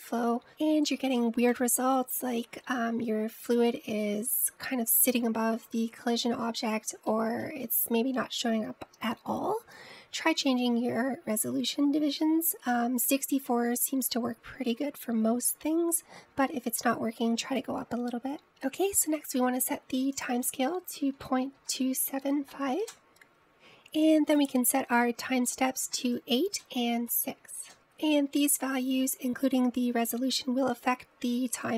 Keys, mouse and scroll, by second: 2.6-5.6 middle drag, 5.8-11.2 middle drag, 21.3-23.5 drag, 23.5 ctrl+z, 25.4-27.7 drag.